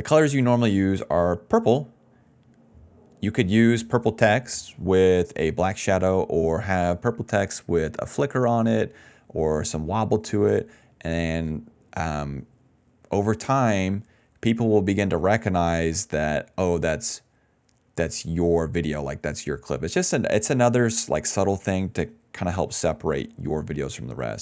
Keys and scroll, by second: 0.0-2.4 typing, 18.5-22.2 typing, 22.7 ctrl+z, 23.3-24.4 typing.